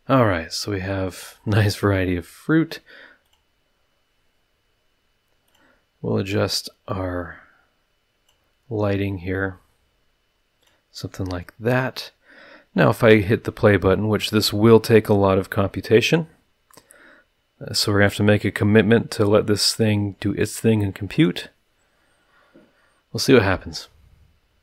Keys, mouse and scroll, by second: 2.1 middle click, 3.2 click, 5.4 click, 6.6-8.5 drag, 9.0-10.8 drag, 11.5 middle click, 21.1 click.